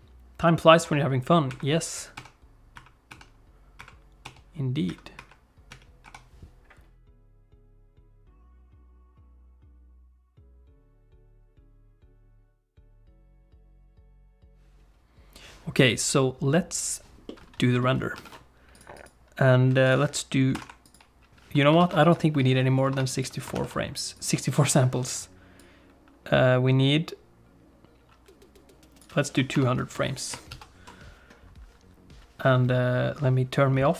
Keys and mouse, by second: 12.1 click, 12.7 ctrl+s, 13.0 alt+a, 13.4 ctrl+s, 17.2 middle click, 18.2 ctrl+s, 19.0 click, 19.9-20.9 drag, 21.8 ctrl+s, 22.1-23.2 drag, 23.5 ctrl+s, 24.2-29.0 drag, 29.5 ctrl+End, 30.5 ctrl+s.